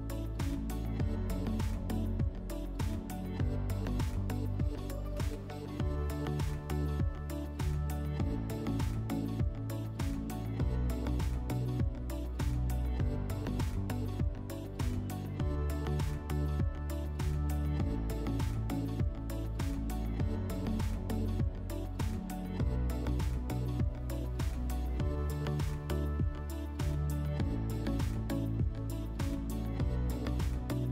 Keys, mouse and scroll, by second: 2.4 click, 4.0-5.2 drag, 5.1 1, 9.4 click, 13.1 click, 13.8-15.5 typing, 16.4 click, 17.7 scroll, 23.9 click, 24.3-27.0 typing, 28.3 click, 29.6 scroll, 30.3 1.